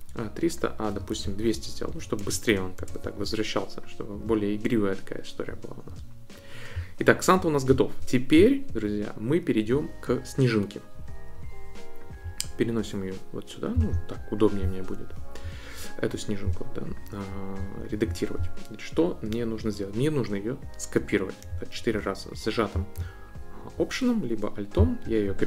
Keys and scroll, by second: 1.2 Left, 1.8 Right, 2.2 BackSpace, 2.4 2, 2.7 Return.